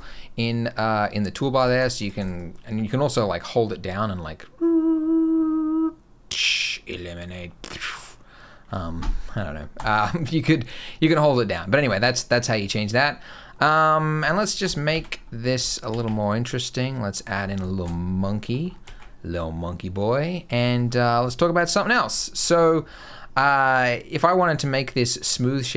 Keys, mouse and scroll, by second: 1.2 click, 1.4 click, 1.6 click, 1.8 click, 2.0 click, 2.2 click, 9.6 click, 12.8 middle click, 13.1 scroll up 2, 13.3 middle click, 13.7-14.0 scroll down 2, 14.0 g, 14.7 shift+c, 15.0-15.4 scroll up 4, 15.5 shift+middle click, 15.7 shift+a, 17.2 scroll up 3, 17.5 shift+middle click, 17.9-18.5 scroll up 4, 18.7 ctrl+2, 20.4 middle click, 20.6-21.0 scroll up 4, 21.1 shift+middle click, 21.6 middle click, 22.0 middle click, 24.1-25.1 scroll up 7.